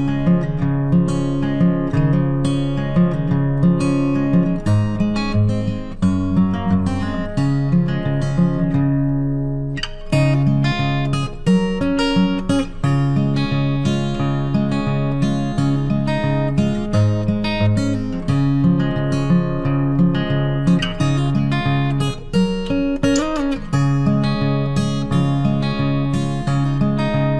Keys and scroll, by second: 2.9 ctrl+t, 10.9 ctrl+t, 21.3 ctrl+t.